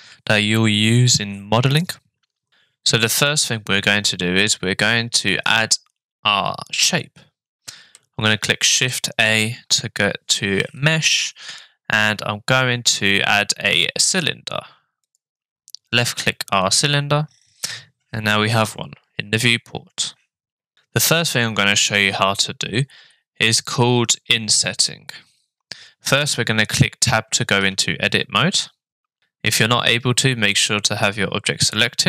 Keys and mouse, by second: 8.7 shift+a, 27.6 Tab, 29.2 Tab.